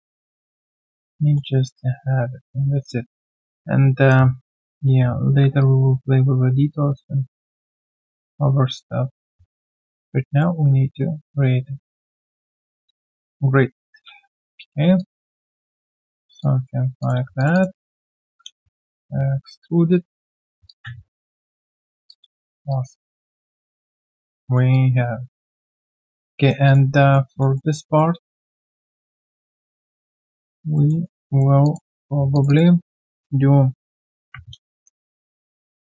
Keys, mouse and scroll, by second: 1.1 alt+middle click, 3.4 shift+right click, 9.3 shift+right click, 9.5 alt+middle click, 10.0 alt+click, 10.9 alt+middle click, 14.3 space, 14.4 space, 15.0 alt+click, 16.4 alt+click, 16.8 alt+q, 16.8 click, 17.5 shift+double click, 18.0 scroll down 1, 18.3 w, 18.9 shift+click, 20.6 alt+click, 20.9 q, 21.1 right click, 22.1 alt+click, 22.4 alt+middle click, 22.7 alt+click, 23.4 alt+middle click, 23.6 alt+right click, 23.8 alt+click, 24.4 alt+middle click, 24.7 alt+click, 25.7 alt+middle click, 26.0 alt+click, 26.3 alt+middle click, 27.3 alt+click, 27.5 alt+middle click, 27.8 alt+right click, 28.7 alt+middle click, 29.0 alt+click, 30.7 alt+middle click, 31.1 right click, 32.3 shift+click, 32.5 shift+double click, 34.1 ctrl+alt+q, 35.0 middle click.